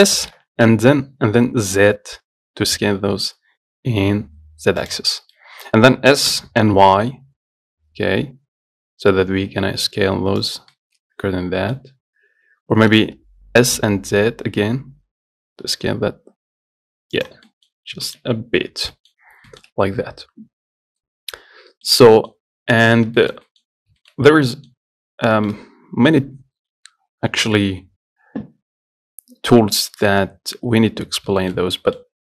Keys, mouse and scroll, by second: 0.5 s, 5.3 scroll down 2, 5.6 middle click, 6.5 s, 11.0-12.9 middle drag, 12.9 s, 17.7-18.3 scroll up 2, 18.3 shift+middle click, 18.6-19.2 scroll down 4, 19.2 middle click, 19.4-19.7 scroll up 3, 19.7-21.7 shift+middle drag, 21.7-22.1 scroll down 1, 22.1 middle click, 22.5-23.1 scroll down 4, 23.1-23.4 scroll up 3, 23.4 shift+middle click, 23.9-24.2 scroll up 1, 24.2 shift+middle click, 24.4 scroll down 2, 24.7 middle click, 25.3 scroll up 1, 25.6 shift+middle click, 25.8 scroll down 1, 31.4 scroll up 1, 31.7 shift+middle click, 31.9 scroll down 1, 32.0-32.2 middle drag.